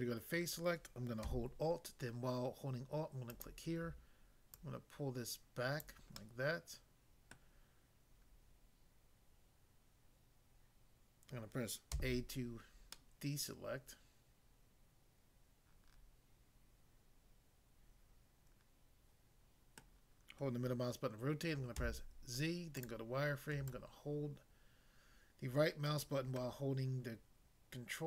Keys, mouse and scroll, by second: 3.3 alt+click, 4.5 alt+click, 5.8 click, 6.2 middle click, 7.3 middle click, 12.0 a, 13.0 middle click, 19.8 middle click, 21.8 z, 22.8 click, 23.8 ctrl+right click.